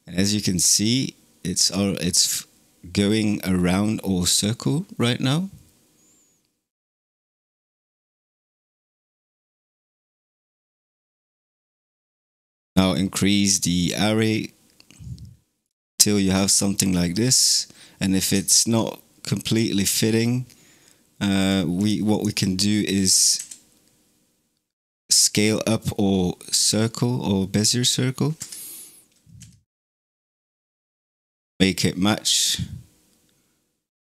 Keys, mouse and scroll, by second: 6.9-15.5 drag, 15.5-17.0 middle drag, 17.0-18.2 scroll up 3, 18.2-19.3 shift+middle drag, 19.3 click, 21.2 click, 21.6 click, 21.9 click, 23.2 s, 29.2 s.